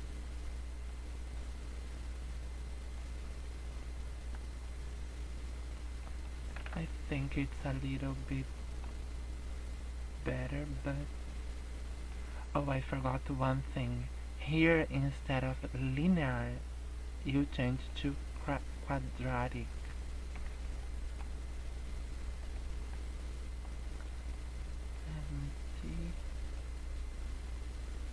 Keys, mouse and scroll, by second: 1.0 click, 2.4 click, 3.9 middle click, 4.4 scroll up 4, 5.8 scroll down 5, 6.1 middle click, 6.6 KP_0, 8.6 middle click, 9.2 scroll up 4, 9.8-10.2 scroll up 2, 11.0 scroll down 4, 11.3 middle click, 12.2-12.7 scroll up 4, 16.1 click, 18.7 middle click, 20.8 shift+middle click, 21.2-21.7 scroll up 2, 22.6 shift+middle click, 23.2 scroll up 1, 23.5 scroll down 3, 24.0 middle click, 24.6 shift+middle click, 25.1 scroll up 3, 26.7 click.